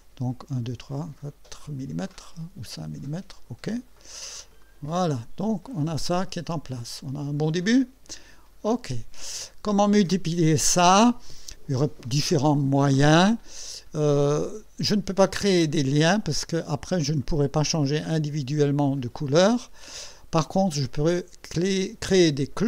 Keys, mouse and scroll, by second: 2.1-3.7 drag, 4.6 click, 5.5-8.7 drag, 8.9 click, 17.2 click.